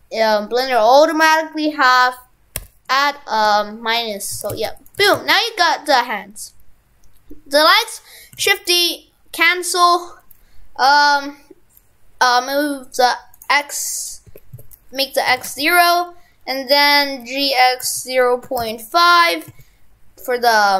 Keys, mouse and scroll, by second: 4.4 shift+f, 5.1 shift+f, 8.4 shift+d, 8.7 right click, 13.4 click, 15.4 shift+f, 17.7 g.